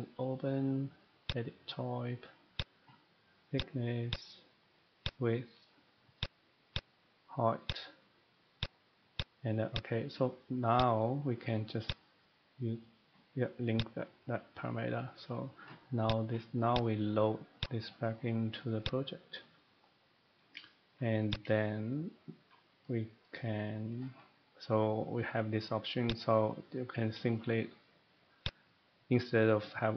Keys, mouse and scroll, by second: 1.3 click, 2.6 click, 3.5 click, 4.1 click, 5.0 click, 6.2 click, 6.7 click, 7.7 click, 8.6 click, 9.1 click, 9.7 click, 10.8 click, 11.9 click, 13.8 click, 16.0 click, 16.7 click, 17.6 click, 18.9 click, 20.9 shift+middle click, 21.3 click, 22.6-25.9 shift+middle click, 23.4-24.1 scroll down 6, 23.9-25.6 scroll up 7, 26.1 click, 28.4 click.